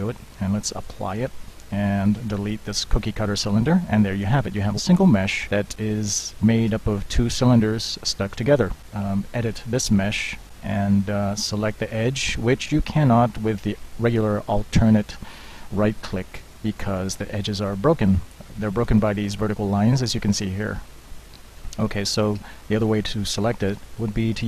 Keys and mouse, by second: 0.7 click, 2.5 Delete, 4.0 z, 4.7 Tab, 8.8 Tab, 9.9 ctrl+Tab, 10.3 middle click, 13.0 middle drag, 18.5 middle click, 18.7 drag, 20.6-22.2 drag, 23.8 ctrl+Tab.